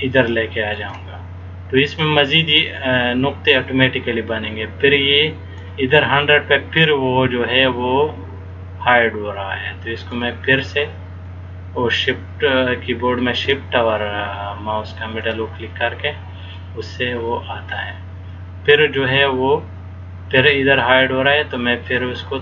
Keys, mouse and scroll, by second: 2.8 click, 7.6 shift+middle click, 11.3 shift+scroll up 1, 11.4 shift+middle click, 15.5 click, 21.7 shift+middle click.